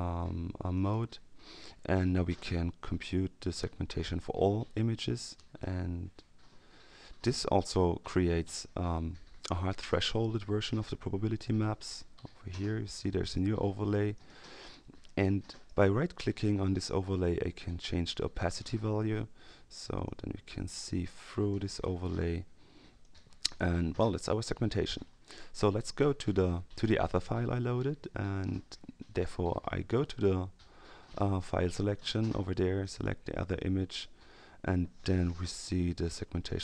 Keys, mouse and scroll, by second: 0.7 click, 5.4 click, 13.2 click, 14.1-16.1 drag, 16.4 right click, 18.4 click, 20.0-22.0 drag, 23.0 click, 31.7 click, 32.8 click, 35.8-36.5 ctrl+scroll up 2.